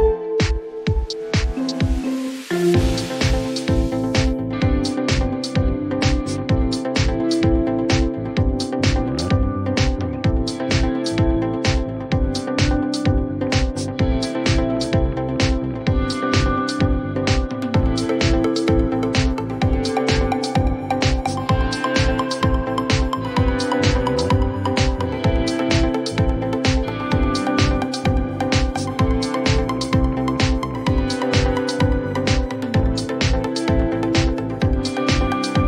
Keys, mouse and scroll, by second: 0.2 typing, 1.4 Return, 3.6 click, 3.9-4.3 typing, 4.8 Return, 5.0 Return, 7.3 Return, 8.8 click, 9.2-9.8 typing, 11.4 click, 14.2-15.5 typing, 16.1 click, 18.8 click, 20.4 click, 22.7 click, 25.8 click, 27.2 right click, 30.0 click, 33.0 click, 34.7 click.